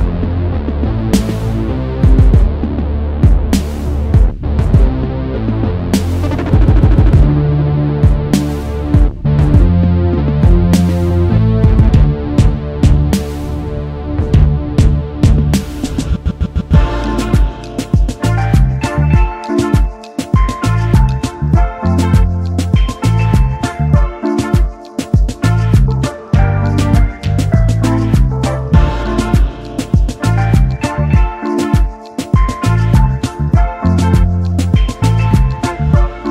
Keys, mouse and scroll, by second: 4.0-4.6 alt+scroll down 1, 4.6-5.0 alt+scroll up 1, 7.6 alt+scroll down 1, 7.9 space, 14.0 v, 14.4-14.8 alt+scroll up 1, 15.2-15.5 alt+scroll up 1, 16.1 alt+click, 17.3-17.8 alt+scroll down 2, 18.8-19.2 alt+scroll up 2, 20.0 alt+click, 21.2 alt+scroll down 2, 22.0 space, 27.4 double click, 32.2 typing.